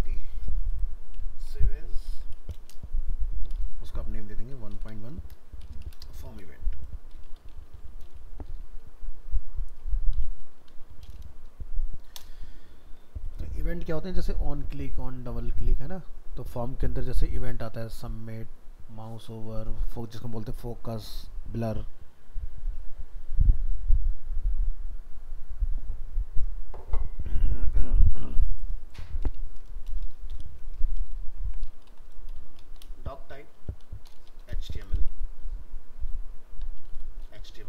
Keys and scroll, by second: 1.4 alt+f, 1.5 alt+移, 2.0 ctrl+v.